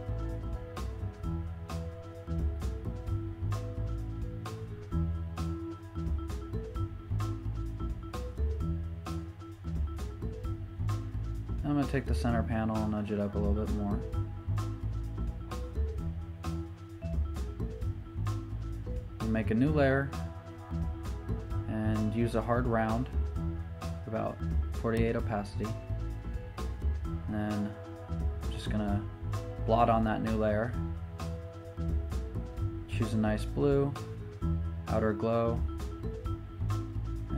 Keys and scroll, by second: 4.4 super+z, 6.2 super+z, 6.4 typing, 9.0-9.5 typing, 12.2 e, 14.3-15.2 typing, 15.9 alt+z, 17.6 v, 18.1 shift+Up, 25.3 shift+super+n, 25.7 Return.